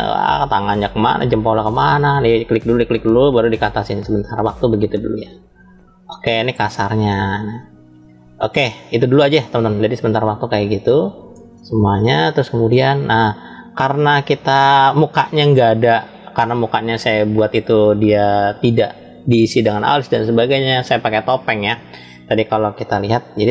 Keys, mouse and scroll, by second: 1.5 click, 2.9 shift+click, 3.9-5.3 drag, 5.6-9.0 middle drag, 9.1 scroll down 2, 10.0 scroll down 2, 10.1 shift+middle click, 11.4 shift+middle click, 12.8 shift+middle click, 13.7 scroll down 2, 14.7-15.7 middle drag.